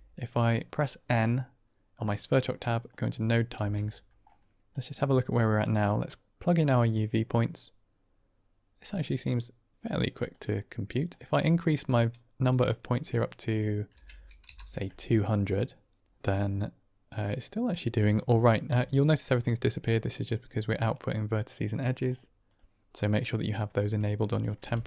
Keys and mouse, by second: 1.8 click, 2.8 click, 3.4 n, 3.9 middle click, 4.6 middle click, 5.6-7.3 drag, 8.9 middle click, 11.2-16.0 drag, 14.1 KP_0, 22.0 click, 22.4 click, 24.2 drag, 24.5 g.